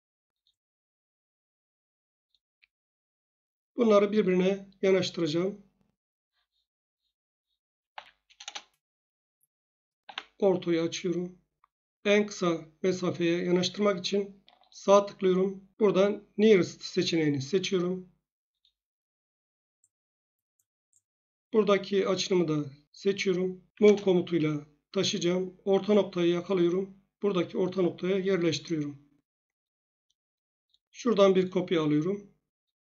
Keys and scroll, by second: 2.5 Escape, 7.9 m, 8.4 Return, 10.0 F8, 23.7 m, 23.8 Return.